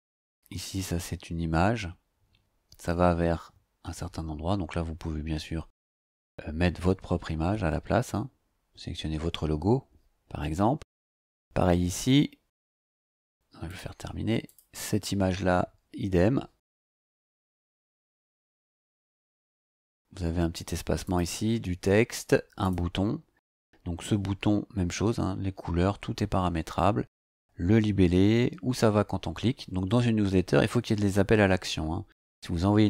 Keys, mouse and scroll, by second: 0.1 click, 10.8 click, 12.1-12.7 scroll down 2, 12.7 click, 13.7 click, 14.4 click, 16.7 click, 19.4 click, 21.0 click, 22.6 click, 31.5-31.9 scroll down 1.